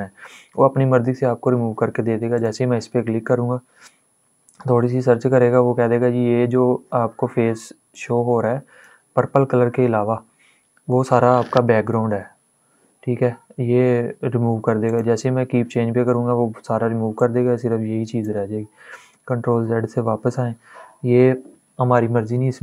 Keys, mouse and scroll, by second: 4.1 click, 7.6-11.3 drag, 11.5 ctrl+Num_Lock, 11.5 click, 11.7 ctrl+z, 14.5 click, 16.8 click, 18.8 ctrl+z.